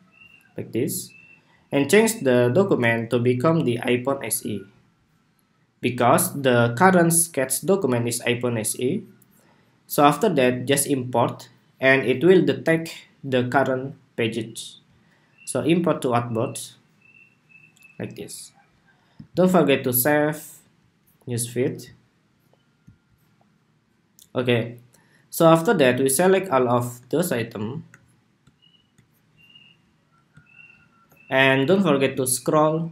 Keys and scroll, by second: 19.0 super+s.